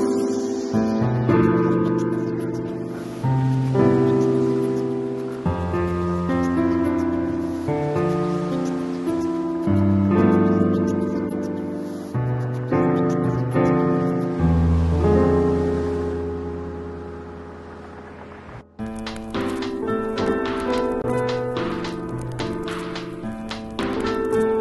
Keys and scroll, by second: 1.4 ], 2.4 ], 4.8 space, 6.4 [, 7.4 ], 8.7 ], 9.9 [, 10.7 ], 11.9 space, 14.4 ], 15.5 [, 16.2 [, 17.5 [, 18.3 space, 23.7 space.